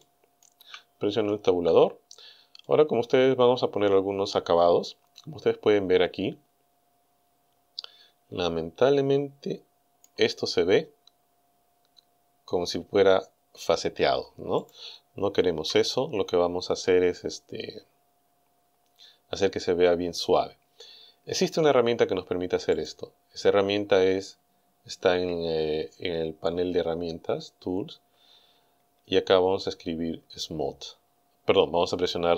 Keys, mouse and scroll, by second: 0.0 shift+middle click, 1.5 Tab, 2.7-10.2 drag, 14.6 click, 15.6 Right, 22.8 click.